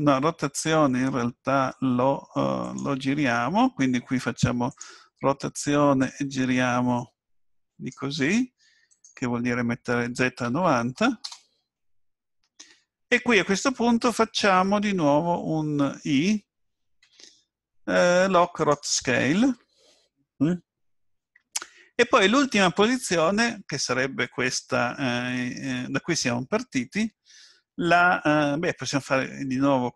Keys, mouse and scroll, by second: 4.7 click, 6.0 click, 8.9 click, 17.6 i.